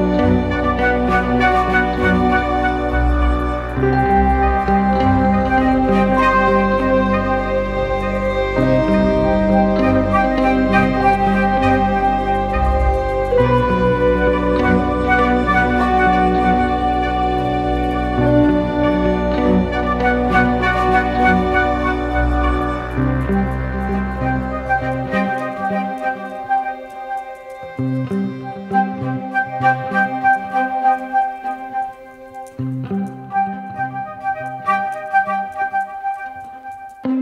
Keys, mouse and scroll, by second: 28.4 ctrl+t, 33.6 Down, 34.8 Down, 35.0 Down, 35.2 Down, 35.3 Down, 35.5 Down, 35.7 Down, 35.8 Down, 36.0 Down, 36.7 Up, 37.1 Return.